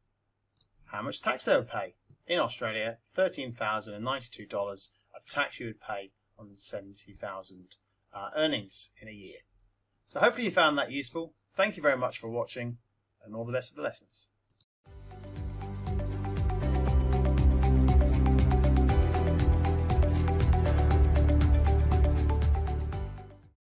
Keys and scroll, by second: 0.5 Return.